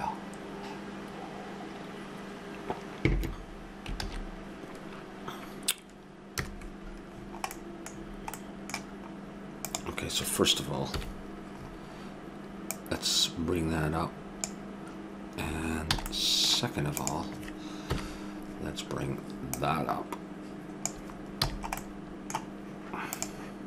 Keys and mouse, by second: 4.0 shift+z, 6.4 KP_0, 9.8-11.0 right drag, 11.0 KP_1, 12.7-14.5 drag, 15.9 a, 17.0-19.2 drag, 17.9 KP_1, 19.5-21.3 drag, 21.4 a, 23.2-23.6 drag.